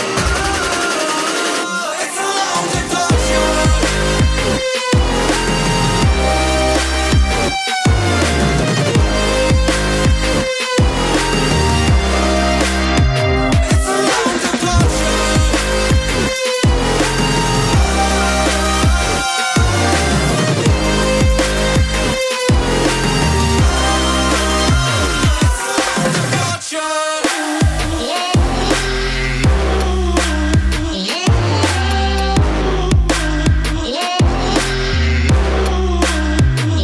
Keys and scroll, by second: 0.9 ctrl+i, 9.1 ctrl+i, 10.7 ctrl+i, 13.1 ctrl+z, 32.7 ctrl+z.